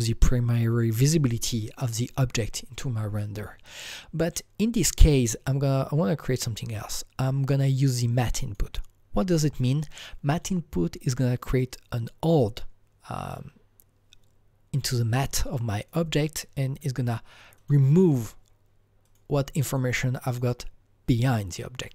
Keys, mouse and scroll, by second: 3.9 click, 4.3-11.1 drag, 15.8-19.0 drag, 17.5 click, 19.0 click, 19.9 click, 20.4-21.9 click.